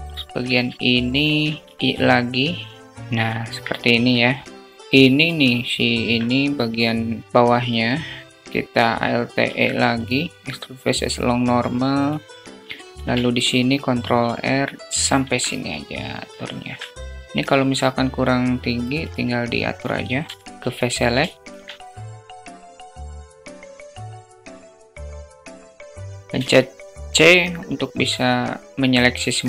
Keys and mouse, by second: 1.0 alt+z, 1.6 i, 2.8 alt+z, 3.0 Tab, 3.3 `, 4.7-5.4 shift+drag, 5.4 Tab, 8.8 alt+e, 12.3 ctrl+r, 14.8 Tab, 16.6 Tab, 17.0 alt+middle click, 19.6 3, 19.9 click, 20.1 click, 20.6 alt+shift+middle click, 21.7 click, 22.7 shift+click, 23.4 shift+click, 23.9 shift+click, 24.3 alt+z, 24.8 alt+z, 26.0 c.